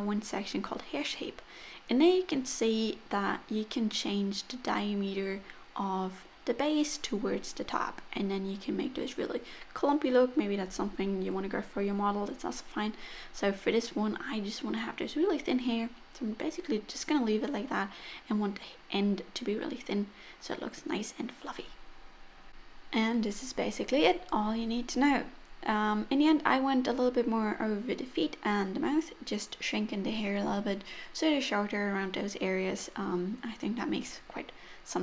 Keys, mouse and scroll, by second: 2.3 click, 2.7 click, 3.1 click, 3.5 click, 3.7 click, 4.4 click, 7.0-7.5 scroll up 2, 10.4 click, 13.0 middle click, 15.4-16.0 scroll down 4, 15.8 middle click, 17.6 click, 17.9 middle click, 19.2 click, 19.8 middle click, 19.8-20.1 scroll down 7, 20.1 middle click, 20.7 click, 21.1 KP_7, 22.2 g, 22.3 middle click, 23.3 r, 23.9 g, 24.6 middle click, 24.7 scroll down 1, 24.8-25.5 scroll up 4, 25.0 middle click, 25.5 click, 25.7 scroll up 2, 25.9 middle click, 26.4-26.9 scroll up 3, 27.1 click, 27.9 Tab, 27.9 middle click, 28.3 click, 29.1 scroll down 2, 29.3 shift+middle click, 29.6 middle click, 30.0-30.7 scroll up 1, 30.7 scroll up 2, 31.5 click, 32.2 middle click, 32.4 click, 33.0 middle click, 33.2 click, 33.8 middle click, 34.0 click, 34.6 middle click, 34.8 click.